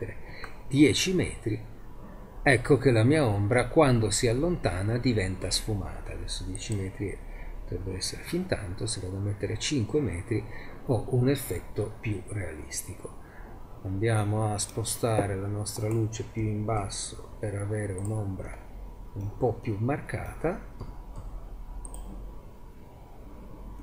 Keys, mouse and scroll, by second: 6.7 click, 8.8-10.7 middle drag, 13.5 z, 14.2-15.8 middle drag, 16.4 g, 17.1 click, 17.1-17.7 drag, 20.8 click, 20.8 g, 22.9 click.